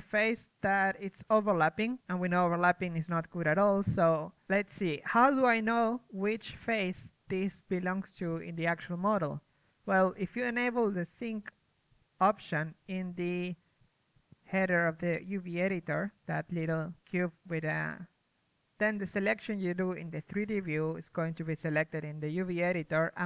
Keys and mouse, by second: 4.3 a, 4.7 a, 10.7-13.7 typing, 12.9 middle click, 14.5 click, 14.8-15.9 middle drag, 15.9-17.1 right drag, 17.1-19.6 drag, 19.6 z, 20.2-22.4 drag, 22.4 KP_Decimal.